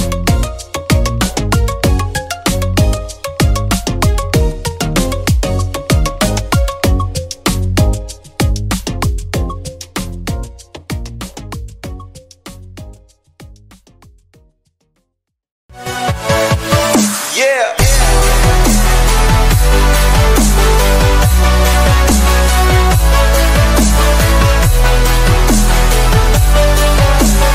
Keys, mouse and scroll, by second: 1.3 ctrl+a, 2.0 ctrl+g, 2.4 p, 4.1 F4, 5.8-6.6 typing, 7.5 F9.